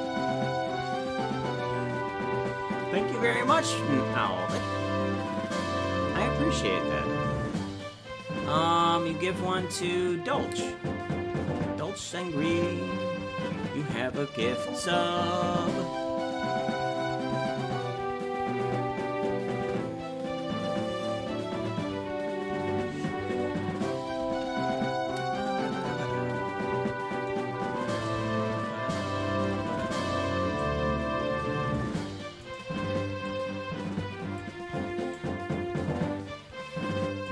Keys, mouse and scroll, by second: 30.6-31.8 shift+drag, 32.5 right click, 33.3-34.4 drag, 35.2 right click, 35.8-37.3 drag.